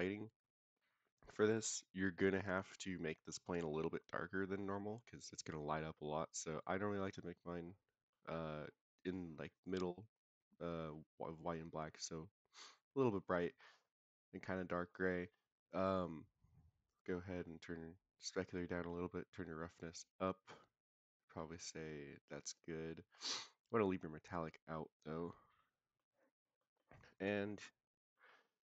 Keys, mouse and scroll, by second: 8.1-8.5 middle drag, 9.5 click, 15.8-16.8 scroll down 2, 16.8-18.4 drag, 18.8-22.5 drag, 24.6 scroll down 1, 24.7-25.1 middle drag, 25.5-25.9 middle drag, 26.5 middle click, 27.1 click, 27.6-28.1 middle drag.